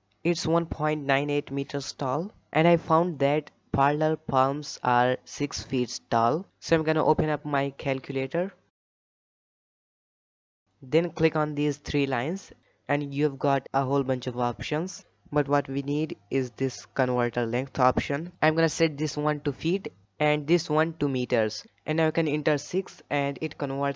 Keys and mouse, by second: 2.3 shift+middle drag, 3.3-4.2 shift+middle drag.